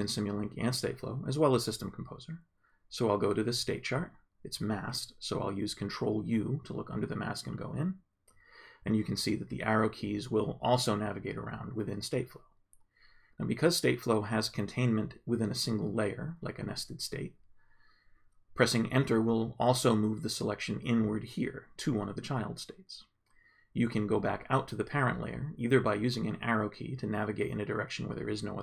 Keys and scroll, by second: 1.0 Left, 5.9 ctrl+u, 9.2 Up, 10.2 Down, 11.9 Down, 20.7 Return, 25.6 Right.